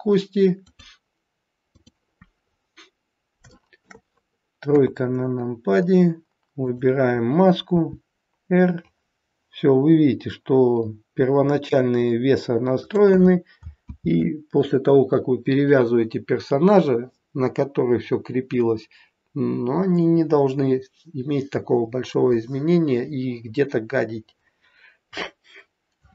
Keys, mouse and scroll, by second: 2.4-3.2 scroll down 3, 3.5 shift+middle click, 4.6 KP_3, 5.0-6.5 scroll up 4, 6.5 click, 8.3 r, 13.9 ctrl+z, 24.4-26.1 scroll down 1.